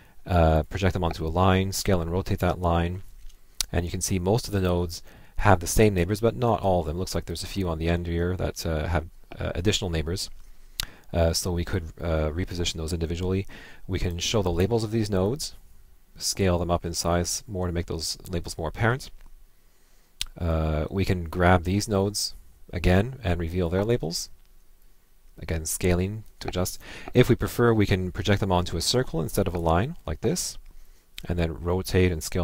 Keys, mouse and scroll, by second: 0.7 ctrl+Left, 16.6 ctrl+Left, 20.5 click, 21.7 click.